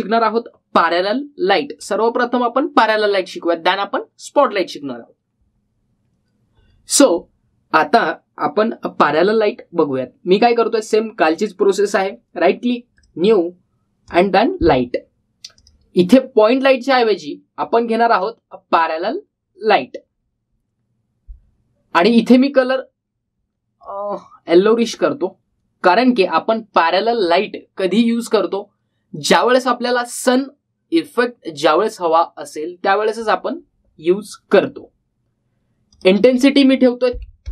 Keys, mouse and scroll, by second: 12.7 right click, 13.7 click, 22.7-24.7 drag, 35.4 click.